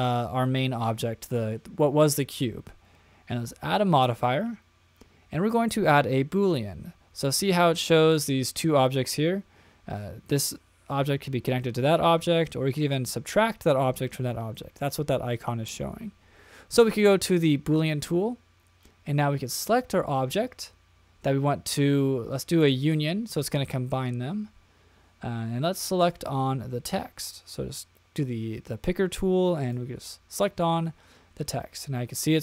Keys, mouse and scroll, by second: 3.9-17.9 drag, 22.8 click, 25.9 click, 31.5-32.4 middle drag.